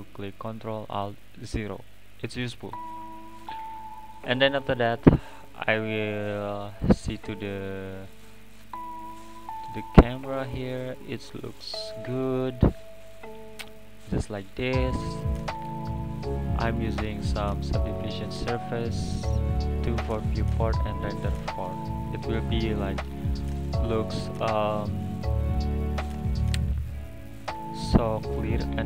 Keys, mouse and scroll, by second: 2.2 click, 2.5-3.3 scroll down 3, 3.3 click, 3.5-6.8 scroll up 4, 7.3-8.6 drag, 10.3 scroll up 1, 13.7 click, 15.4 click.